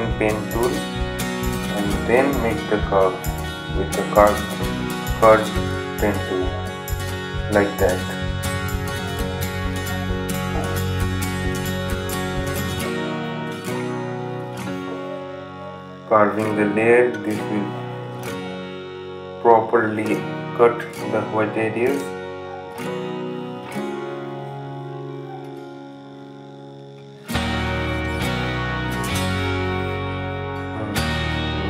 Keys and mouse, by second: 11.6 right click, 13.4-31.6 drag.